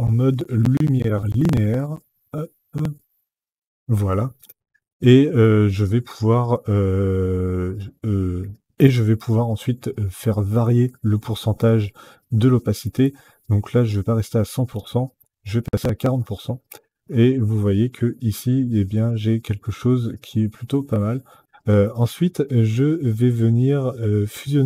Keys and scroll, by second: 14.4 KP_4, 14.7 KP_0, 15.5 Return.